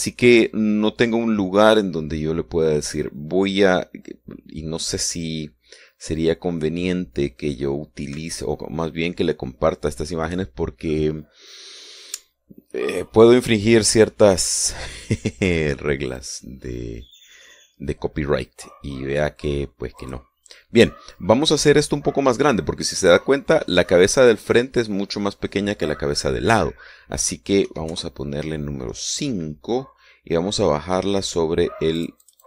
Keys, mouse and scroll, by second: 17.1 click, 21.0 click, 28.7 KP_5, 28.9 KP_Enter.